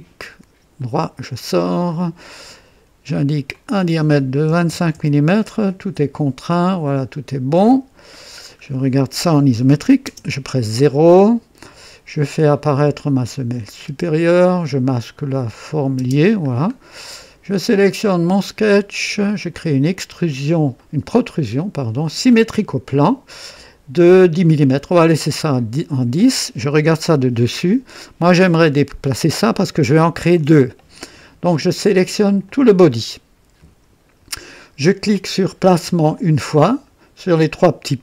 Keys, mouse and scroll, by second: 0.8 right click, 1.9 click, 3.5 click, 4.5 KP_2, 4.7 KP_5, 4.9 Return, 7.6 click, 8.4 scroll down 1, 10.0-11.0 typing, 10.9-11.7 right drag, 13.5 click, 13.6-14.4 typing, 15.6 click, 16.0 typing, 16.5-16.8 scroll up 1, 17.1 right click, 17.5-18.5 typing, 18.1 click, 19.5 click, 20.8-21.4 right drag, 22.3 click, 25.4 click, 26.9 KP_2, 27.6 right click, 32.4 click, 36.1 click, 37.8 click.